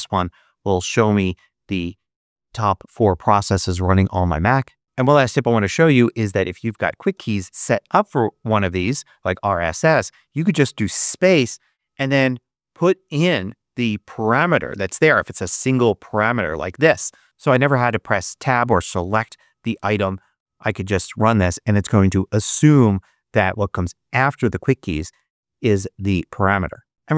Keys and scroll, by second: 4.8 Escape, 7.0 super+space, 8.4 s, 10.6 space, 11.4 super+space, 12.1 super+v, 20.2 Return.